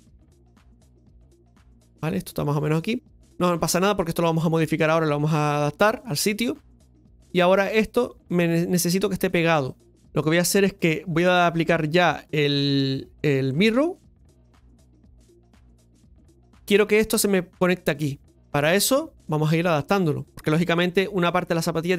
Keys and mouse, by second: 10.0 Tab, 12.5 click, 13.7 Tab, 15.3 click, 18.3 Tab, 18.8 middle click, 19.9 right click, 20.3 middle click.